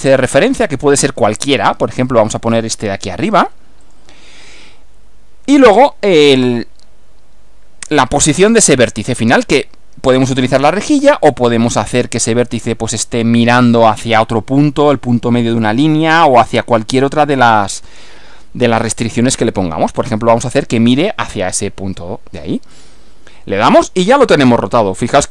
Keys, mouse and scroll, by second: 3.8 click, 22.8 click, 24.8 scroll down 1.